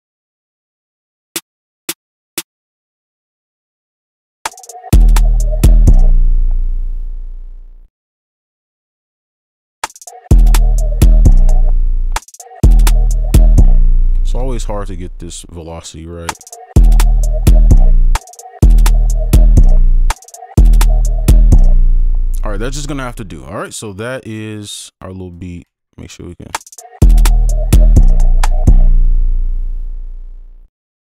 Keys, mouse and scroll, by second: 0.5 right click, 2.1 double click, 2.7 ctrl+click, 5.9 right click, 6.0 space, 6.3 ctrl+click, 9.6 ctrl+alt+scroll up 4, 11.4 click, 11.7 ctrl+space, 12.1 scroll up 1, 12.4 right click, 12.4 space, 13.8 space, 13.9 click, 14.2-14.7 ctrl+alt+scroll down 4, 14.7 right click, 15.6 scroll down 1, 17.8 space, 20.9 space, 21.5 right click, 24.0 ctrl+right click, 25.3 click, 25.7 scroll up 2, 27.9 space, 28.1 click.